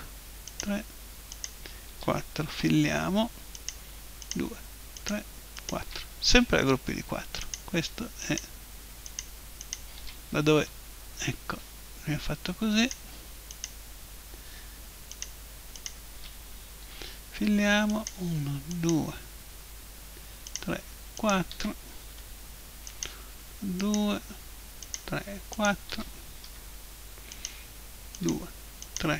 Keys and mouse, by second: 2.5 f, 2.9 middle click, 3.6-7.2 right drag, 6.3 f, 7.1 middle click, 7.4-11.3 right drag, 10.6 f, 11.3-12.8 middle drag, 12.8-17.4 right drag, 16.8 f, 17.4 middle click, 17.4 right click, 17.6 middle click, 17.9-22.8 right drag, 22.1 f, 22.8 middle click, 22.9-27.1 right drag, 26.4 f, 27.1 middle click, 27.4-29.1 right drag.